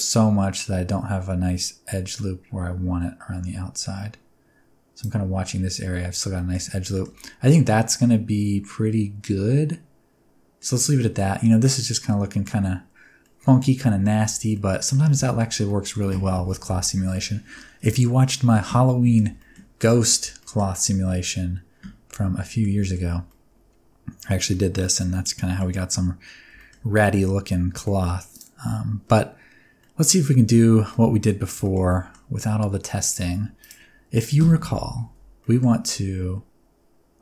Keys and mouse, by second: 6.4 shift+middle click, 6.9 shift+middle click, 7.2-10.7 middle drag, 11.0 middle click, 12.1 middle click, 13.3 middle click, 14.2 Tab, 14.5-14.9 middle drag, 15.3 shift+middle click, 15.7 middle click, 17.1-17.5 middle drag, 17.9 shift+middle drag, 18.7-19.2 middle drag, 19.4 shift+middle click, 19.8 middle drag, 20.4 shift+middle click, 20.7-22.6 middle drag, 22.8 shift+middle click, 23.3-24.3 middle drag, 24.5-25.6 middle drag, 26.6 shift+middle click, 26.9 middle click, 28.3 click, 29.8 middle drag, 30.4 Tab, 30.6 click, 30.6 middle click, 30.6 right click, 30.9 middle click, 31.3 click, 31.3 middle click, 31.3 right click, 31.6 shift+middle click, 31.9 middle click, 32.4-33.4 drag, 32.4-33.4 middle drag, 32.4-33.4 right drag, 33.2 1, 33.9 click, 33.9 middle click, 33.9 right click, 34.4 alt+z, 34.5 click, 34.5 middle click, 34.5 right click, 35.1 alt+z, 35.4 middle click, 35.8 click, 35.8 middle click, 35.8 right click.